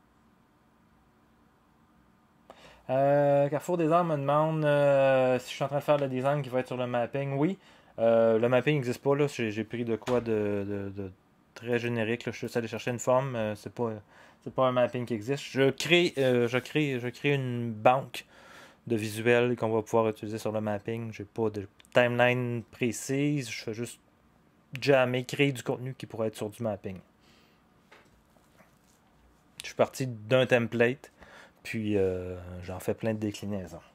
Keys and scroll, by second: 10.0 0.